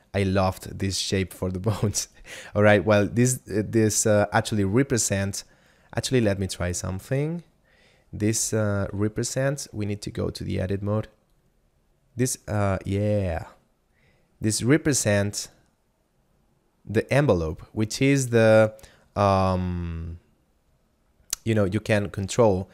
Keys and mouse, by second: 6.1 middle click, 9.9 Tab, 10.3 right click, 11.4 click, 15.6 click, 19.3 click.